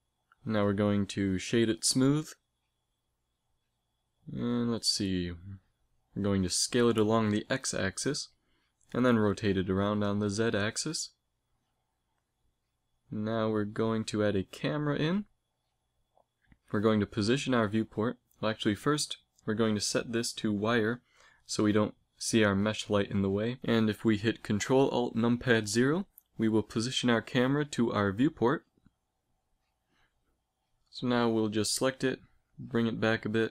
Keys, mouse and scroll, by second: 1.3 Tab, 2.1 space, 5.6 r, 8.1 s, 9.8 r, 13.5 shift+a, 18.3-21.7 right drag, 19.4 click, 21.7-22.7 drag, 22.7 a, 23.3-26.7 middle drag, 28.3 ctrl+alt+KP_0, 30.0-31.8 drag, 30.5 g.